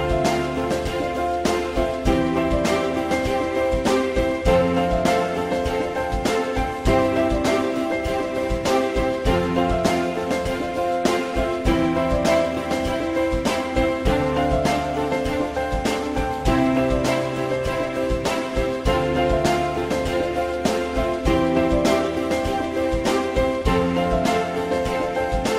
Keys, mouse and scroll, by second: 7.1 F4, 11.3 click, 11.8 click, 14.6 shift+click, 15.5 click, 16.1 ctrl+shift+e, 18.9 ctrl+shift+e.